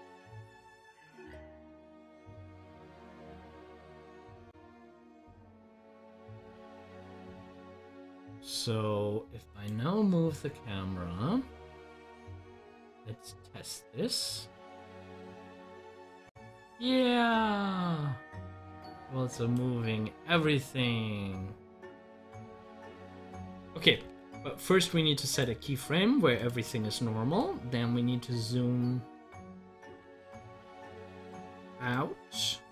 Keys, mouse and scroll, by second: 22.1 scroll down 1, 24.0 ctrl+z, 30.5-32.7 drag.